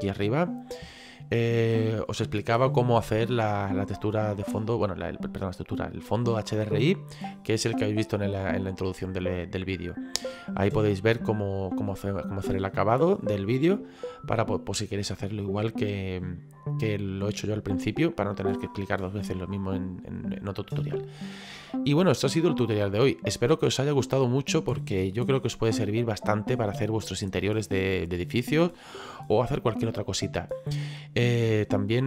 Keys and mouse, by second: 7.0 middle click, 21.6 middle click.